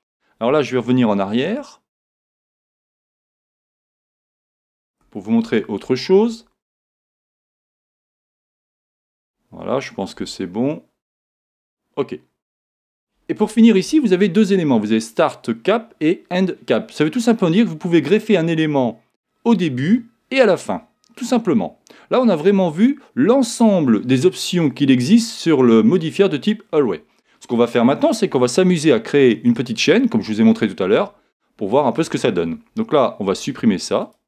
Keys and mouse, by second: 1.4 super+z, 4.3-5.8 z, 6.3 z, 6.6 z, 7.9 z, 10.1 r, 28.5-30.4 middle drag, 33.3 x.